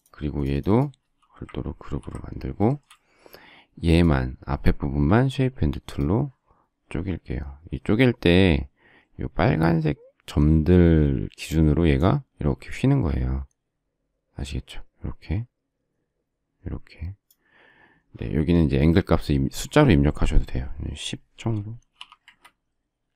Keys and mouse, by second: 1.7 ctrl+g, 6.0 click, 21.5-22.4 typing.